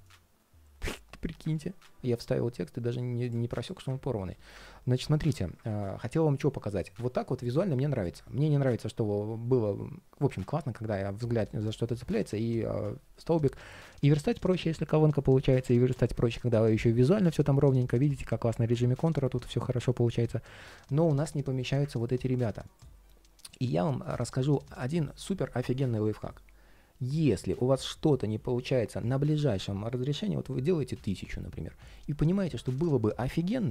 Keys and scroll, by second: 1.3 super+z, 7.9 ctrl+shift+4, 15.4 ctrl+shift+3, 20.0 ctrl+shift+3.